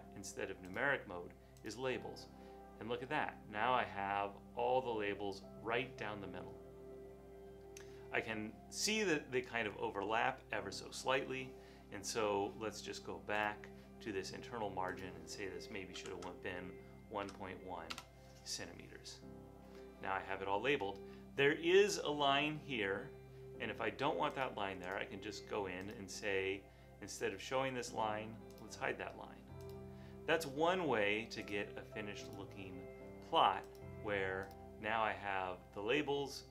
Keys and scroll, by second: 17.0-17.8 typing, 18.0 Return.